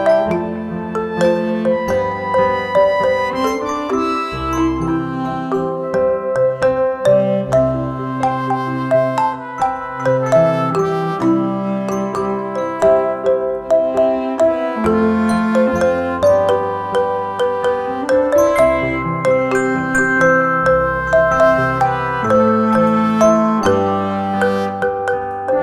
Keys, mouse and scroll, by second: 0.5 click, 7.0 click, 9.0 click, 13.0-15.7 drag, 19.4 click, 24.4 right click.